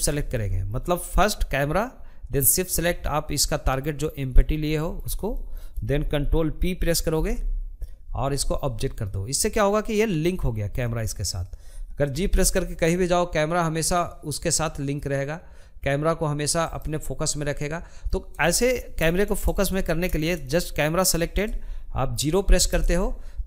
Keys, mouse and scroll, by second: 3.5 scroll up 1, 3.7-5.5 shift+middle drag, 5.5 ctrl+p, 8.7 click, 9.2-10.6 middle drag, 10.6 g, 16.0-21.1 middle drag, 21.1 KP_0.